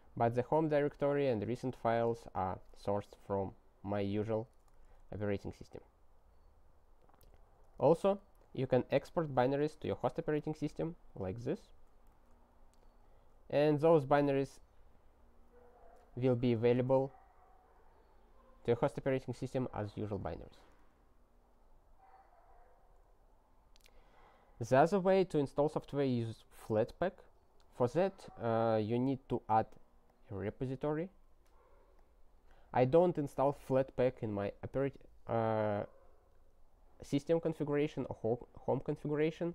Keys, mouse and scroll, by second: 4.9 Return, 7.7 ctrl+g, 9.3 click, 9.6 ctrl+space, 9.7 ctrl+a, 10.0 alt+w, 10.3 super+t, 11.2 Return, 11.9 ctrl+y, 12.2 Return, 13.1 click, 14.2 Return, 16.7 Return, 19.8 alt+w, 21.6-24.6 scroll down 30, 30.0 click, 31.3 click, 32.0 click.